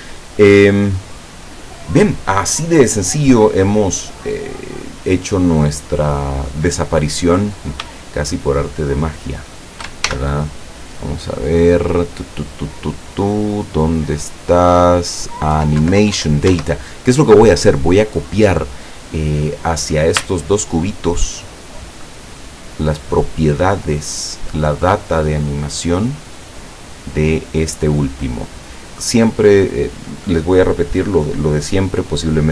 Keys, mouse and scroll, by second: 3.4-4.5 middle drag, 7.5 right click, 8.0 shift+right click, 8.6 shift+right click, 10.1 ctrl+shift+l, 15.6 Left, 15.9 Down, 16.6 Escape, 19.4 right click, 20.5 shift+right click, 22.3 shift+right click, 28.8 shift+right click.